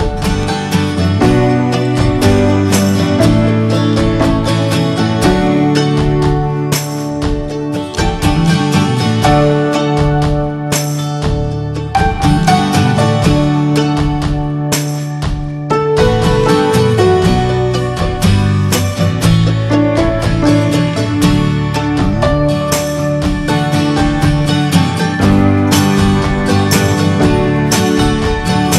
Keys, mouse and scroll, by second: 0.4 click, 0.9 scroll down 2, 1.1 middle click, 2.0 ctrl+z, 3.6 alt+middle click, 4.1-4.5 scroll up 2, 6.4 click, 6.8 scroll down 1, 7.0 middle click, 8.0 scroll down 1, 8.3 shift+middle click, 8.9 scroll up 2, 10.9 middle click, 11.1-11.4 scroll up 2, 11.3 middle click, 13.5 click, 13.7 scroll down 1, 14.0 middle drag, 14.3 scroll down 1, 14.5 shift+middle click, 15.1-15.8 scroll up 5, 15.8-17.8 middle drag, 17.8 click, 18.6 ctrl+z, 22.3 click, 23.1 ctrl+z, 25.7-27.2 drag, 27.7-28.7 scroll down 6, 27.9 middle click, 28.3 shift+middle click.